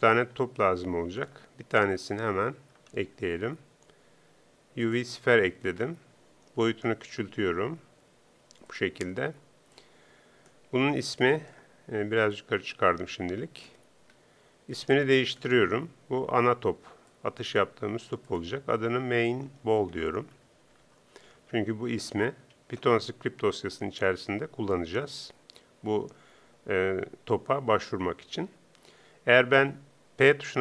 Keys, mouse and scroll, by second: 2.9 shift+a, 6.9 s, 8.7-11.7 drag, 12.3-14.1 drag, 14.1-15.3 middle drag, 15.3-20.1 drag, 22.3 l.